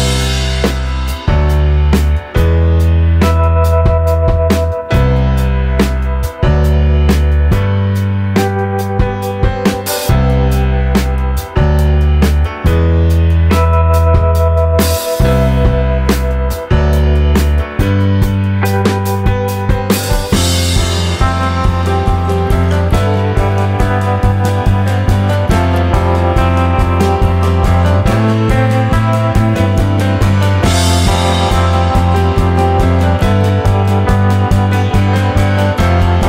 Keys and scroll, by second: 24.6-26.4 typing.